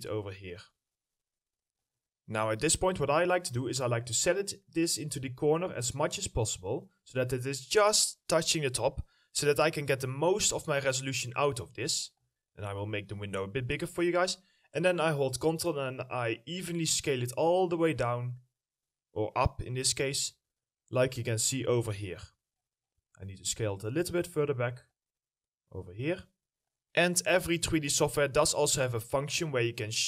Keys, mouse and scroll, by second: 3.4 scroll up 1, 6.4 middle click, 6.7-8.7 scroll up 1, 9.5-10.1 scroll down 1, 10.1 middle click, 10.6 scroll down 1, 10.9 middle click, 14.0 middle click, 15.6 ctrl+click, 20.6-22.6 scroll up 1, 22.6 scroll down 1, 23.2 middle click, 23.5-23.8 scroll up 1, 25.0 ctrl+click, 29.7 middle click.